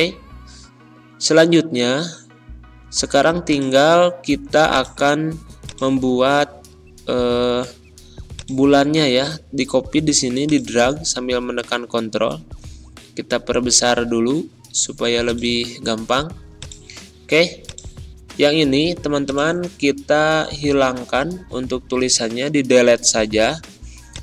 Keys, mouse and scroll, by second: 0.5-1.1 scroll down 1, 1.1 ctrl+scroll down 1, 3.4 click, 8.2-10.4 ctrl+drag, 15.1 click, 20.2 ctrl+a, 22.6 BackSpace, 24.1 click.